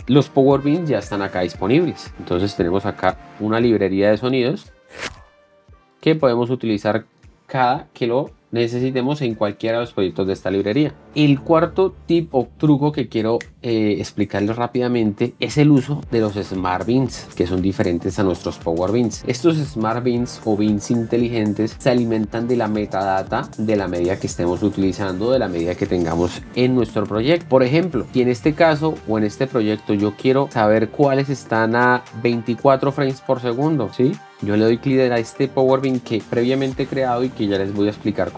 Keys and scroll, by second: 5.2 space.